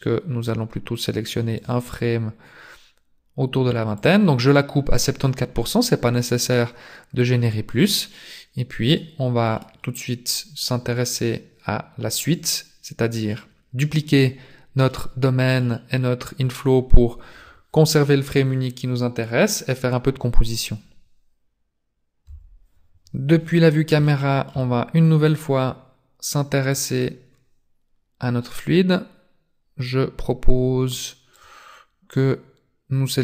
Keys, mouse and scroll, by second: 4.2 click, 5.6 scroll down 2, 6.1 middle click, 8.6 scroll down 3, 9.2 middle click, 13.6 middle click, 15.1 middle click, 22.3 KP_0, 24.0 shift+middle click, 26.5 click, 27.0-27.3 scroll up 3, 28.2 scroll down 1, 30.9 click, 32.1 click.